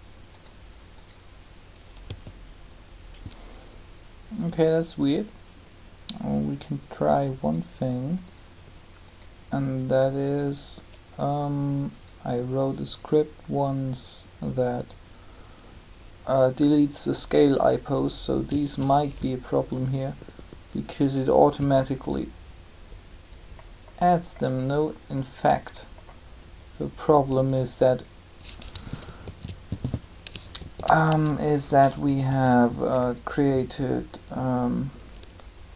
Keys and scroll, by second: 2.0 a, 29.0 ctrl+z, 32.0 typing.